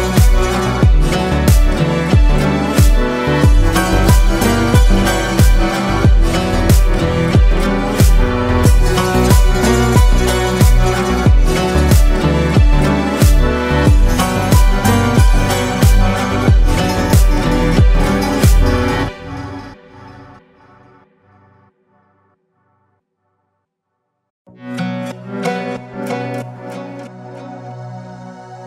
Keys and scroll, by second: 5.0 ctrl+space, 17.8 ctrl+space, 18.5 ctrl+space, 24.9 ctrl+space.